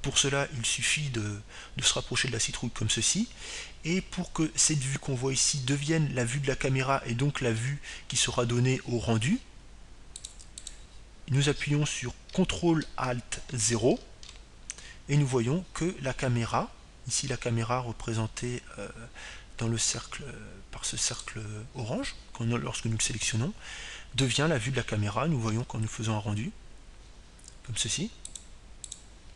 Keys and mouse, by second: 0.0-1.4 drag, 14.4-15.9 drag, 17.2 ctrl+alt+KP_0, 24.8-26.8 right drag.